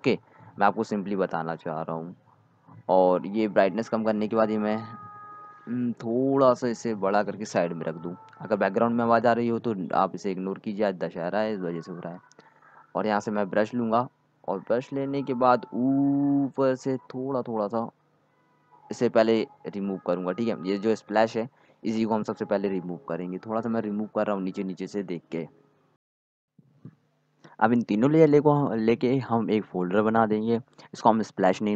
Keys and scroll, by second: 7.7 ctrl+t, 15.1 x, 16.2 ctrl+z, 16.5 x, 18.0 x, 30.2-31.7 typing.